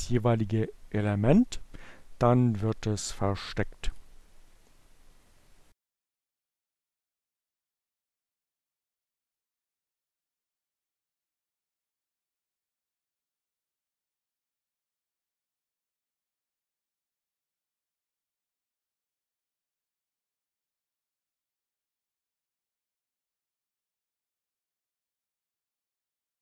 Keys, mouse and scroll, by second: 2.0 click, 3.3 click, 5.1 click, 6.3-8.2 drag, 8.5-10.4 typing, 13.0 click, 14.6 click, 17.4 click, 20.5 click, 21.9 click, 22.8-24.3 typing, 25.3-26.4 drag.